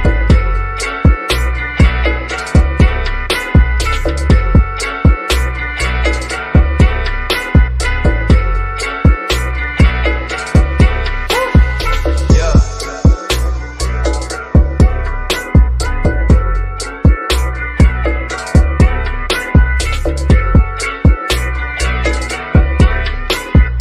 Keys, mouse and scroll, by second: 2.3-4.5 scroll up 1, 5.1 alt+l, 7.2-8.7 scroll down 1, 9.2 ctrl+l, 11.5 click, 13.4 typing, 15.2-16.1 typing, 17.5 click, 19.7 scroll down 1, 21.0 click, 23.1-23.8 scroll up 1.